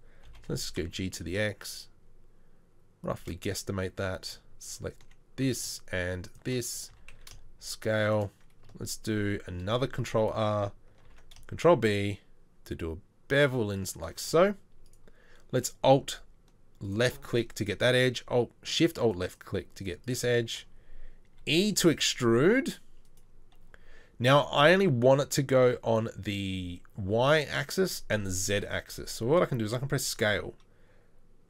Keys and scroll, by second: 0.3 g, 6.9 s, 9.7 ctrl+r, 11.1 ctrl+b, 21.4 e, 29.7 s.